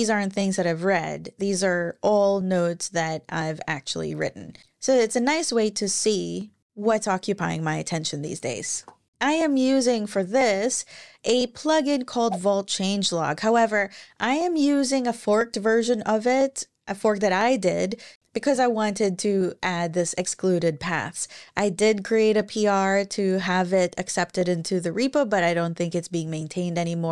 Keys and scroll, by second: 8.4 super+w, 9.7 super+,.